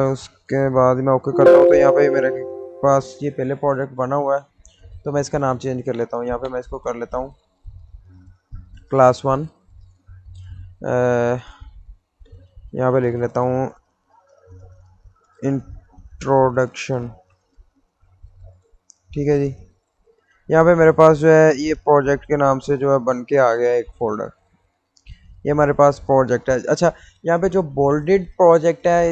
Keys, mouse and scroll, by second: 0.0 click, 8.5 click, 9.4 space, 11.0 shift+g, 13.2 shift+i, 14.9 n, 16.0-18.5 typing, 19.5-25.6 drag.